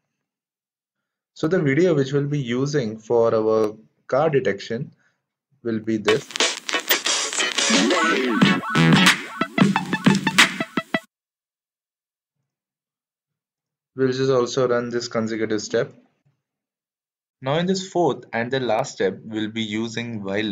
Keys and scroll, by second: 11.5 Escape, 16.0 shift+Return.